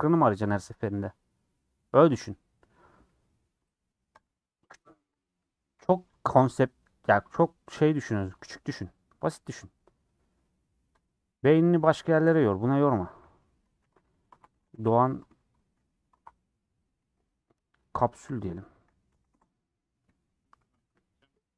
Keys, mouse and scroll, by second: 6.2 click, 6.3 a, 9.3-21.5 drag.